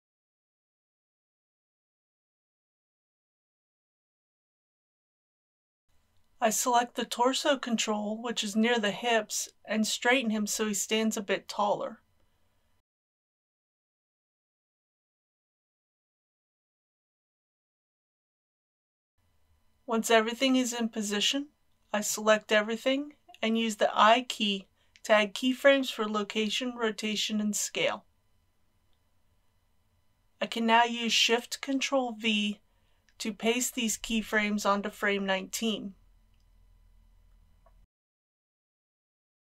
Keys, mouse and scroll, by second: 1.5 click, 2.0 r, 2.5 click, 3.0 r, 4.4 r, 5.2 click, 8.6 KP_1, 9.7-10.1 scroll down 1, 11.4 g, 11.6 z, 17.0 shift+click, 17.9 r, 18.5 click, 19.7 a, 21.5 i, 23.1-28.0 drag, 29.1 ctrl+c, 31.1-33.9 drag, 33.9 Right, 35.6 ctrl+shift+v.